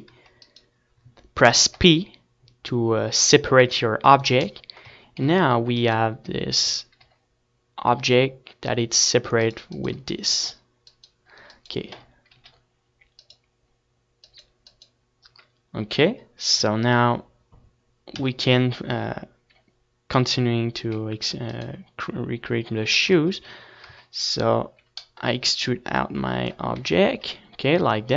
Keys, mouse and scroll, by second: 2.8 shift+d, 3.3-4.9 right drag, 4.2 p, 6.9-8.4 middle drag, 7.4 Tab, 7.7 z, 8.4-10.0 right drag, 9.4 g, 11.8-15.9 right drag, 12.2 g, 14.1 z, 14.4 KP_1, 20.2 Tab, 21.5-22.6 middle drag, 22.6 e, 23.5-25.1 right drag, 24.2-25.4 middle drag, 24.9 Tab, 25.6 Tab, 27.6-28.1 drag.